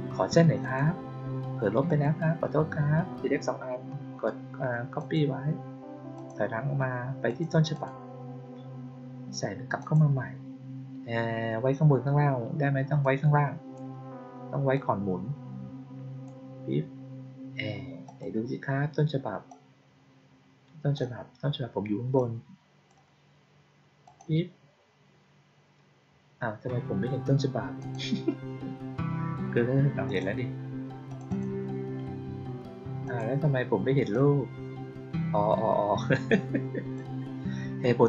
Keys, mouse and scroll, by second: 0.5 click, 1.8 ctrl+click, 4.9 click, 6.1 click, 7.2 click, 7.6 click, 9.7 click, 12.9-13.6 drag, 14.6-16.1 drag, 18.0 click, 19.4-20.8 drag, 22.1-22.8 drag, 23.9 click, 27.7 click, 30.0 click, 31.0 click, 31.2 click, 32.9 click, 34.0-36.8 drag, 37.9 click.